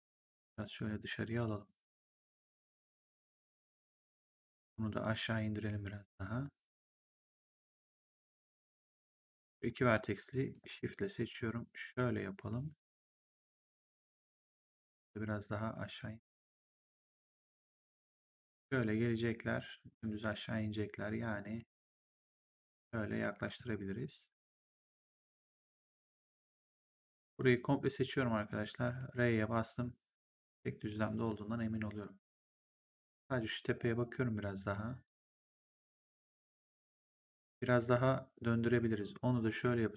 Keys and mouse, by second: 3.8 click, 5.0 click, 9.2 click, 10.3 shift+click, 14.7 click, 15.9 click, 21.2 click, 23.5 click, 25.0 click, 27.3 click, 28.7 r, 29.7 click, 30.8 w, 34.9 click, 38.5 click.